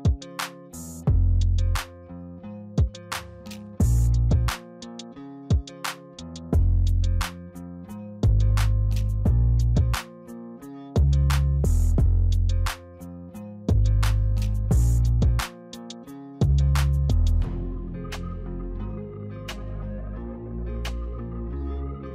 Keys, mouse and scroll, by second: 0.6 click, 1.6-3.0 middle drag, 3.0-3.7 scroll down 2, 3.7-5.9 middle drag, 5.9 click, 9.2-11.5 middle drag, 11.5-14.5 drag, 17.9 w, 18.6 Tab, 19.0-19.5 scroll down 1, 19.5-22.1 middle drag.